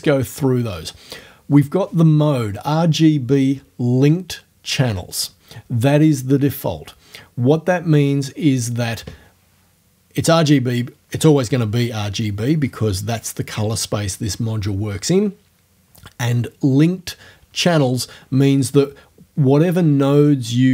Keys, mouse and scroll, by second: 20.1 click.